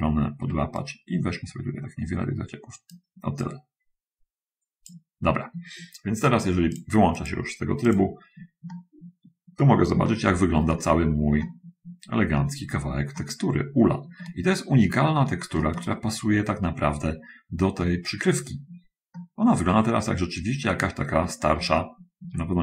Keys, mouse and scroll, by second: 0.8-3.3 right drag, 3.7-5.3 drag, 7.3 click, 8.1 click, 8.9 middle click, 9.9-12.3 shift+middle drag, 12.6 middle click, 13.2-15.7 middle drag, 15.9-18.9 shift+middle drag, 19.2 middle click, 21.1-21.6 scroll up 2, 21.9 shift+middle click, 22.5-22.6 shift+scroll up 6.